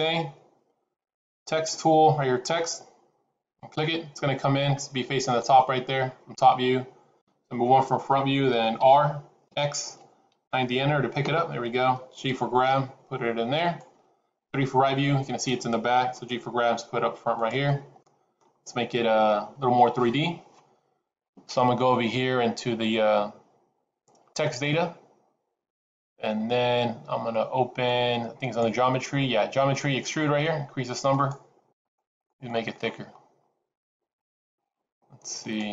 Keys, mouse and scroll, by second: 4.8 middle click, 7.1 KP_1, 8.7 r, 12.2 g, 14.5 KP_3, 16.0 g, 17.5 middle click, 24.3 click, 28.3 click, 31.1 click, 31.6 click, 32.0 click, 32.2 click, 33.0-33.6 scroll up 6, 35.3 click.